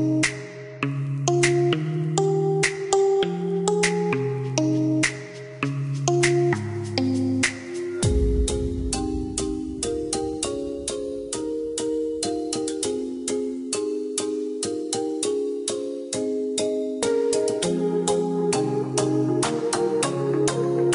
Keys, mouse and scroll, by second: 1.3 click, 4.1-5.5 scroll up 1, 5.5 click, 8.6-9.2 scroll down 1, 9.6 click, 13.0 KP_5, 13.6 KP_Enter, 16.1 click, 16.8 middle click, 18.8 click, 19.5 middle click.